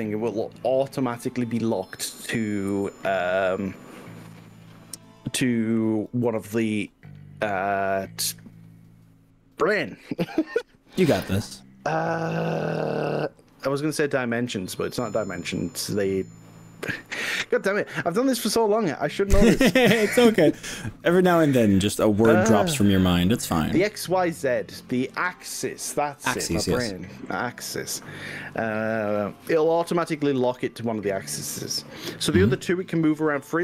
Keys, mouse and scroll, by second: 5.6 click.